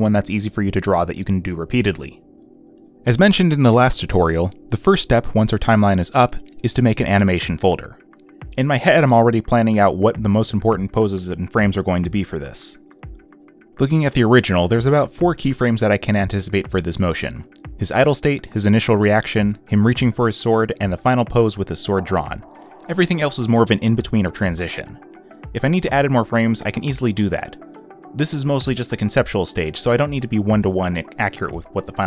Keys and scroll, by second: 15.9 ctrl+z, 24.3 ctrl+z, 24.8 z, 25.8 ctrl+z, 27.3 ctrl+z, 28.0 b, 29.4 ctrl+z, 29.8 ctrl+z, 30.2 ctrl+z, 31.7 space.